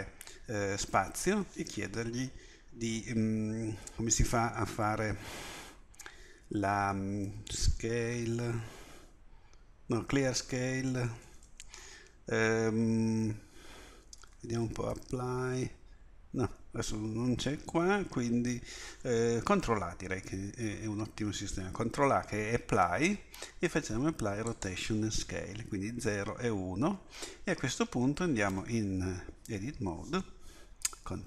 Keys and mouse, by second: 0.9 space, 11.0 BackSpace, 14.4 BackSpace, 14.5 p, 20.2 ctrl+a, 28.5 Tab, 31.0 ctrl+b.